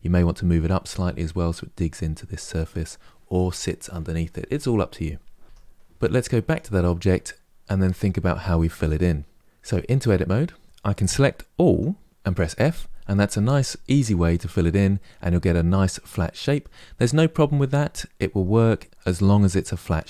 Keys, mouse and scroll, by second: 5.4 Tab, 6.2 click, 9.3 Tab, 9.8-11.4 middle drag, 11.4 a, 12.1 f, 14.7-17.7 middle drag.